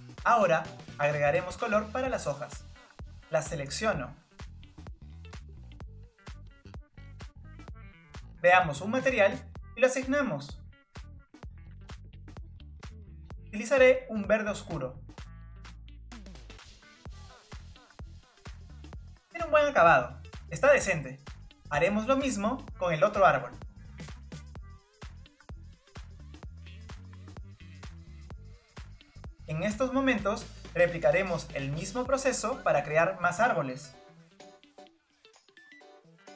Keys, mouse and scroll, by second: 1.3 Tab, 2.2 click, 3.4-6.5 middle drag, 7.0 Tab, 8.6 Tab, 10.4-15.0 drag, 17.1 click, 17.3 scroll down 3, 17.5 middle click, 17.6 click, 17.8 middle click, 18.4 scroll up 6, 18.6 click, 18.8 click, 19.0 Tab, 19.1 scroll down 2, 19.2 click, 19.7-20.7 scroll down 2, 20.7-24.2 middle drag, 24.2 scroll up 1, 24.4 click, 24.6 Tab, 24.9 click, 25.2 click, 26.1 click, 27.5 Tab, 27.6 click, 27.9 Tab, 28.0 Tab, 28.2 click, 30.1 Tab, 30.2 click, 30.6-33.4 middle drag, 33.4-34.1 scroll down 2, 34.1-35.2 shift+middle drag, 35.3 click, 35.4 scroll down 2, 35.6 Delete, 35.6 click, 35.7 scroll up 2, 35.8 click, 36.0 scroll down 5, 36.0 click, 36.1 scroll up 3, 36.2 click, 36.3 scroll down 1, 36.3 middle click, 36.3 scroll up 9.